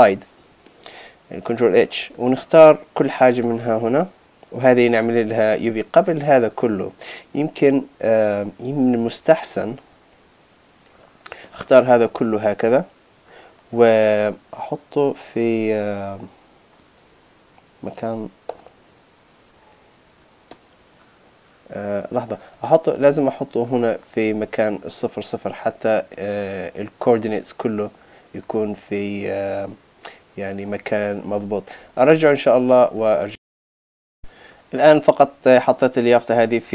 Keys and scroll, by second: 9.0 super+z, 18.5 Return, 20.1 super+z.